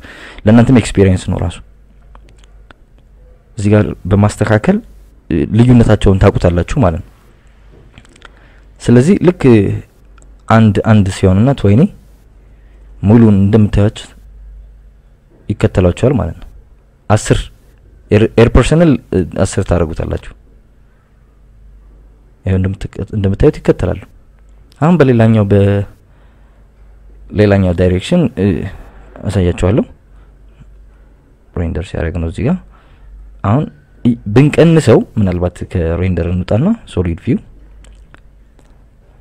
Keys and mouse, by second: 0.6 click, 1.8 click, 6.9 click, 8.0 click, 9.0 click, 24.7 click, 26.3 click, 27.3 click, 36.4 click, 37.3 click, 38.1 click.